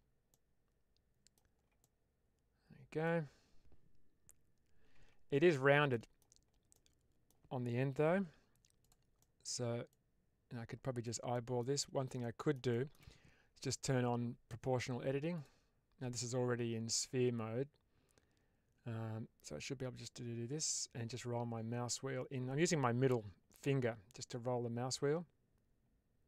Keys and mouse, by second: 0.2-1.2 middle drag, 1.7-2.9 middle drag, 4.8 Tab, 5.8 middle click, 6.7 middle click, 8.0 1, 9.1 middle click, 9.8-10.9 drag, 11.2 middle click, 11.7 ctrl+z, 12.1 middle click, 12.6 shift+middle click, 15.2 click, 19.8-26.2 drag.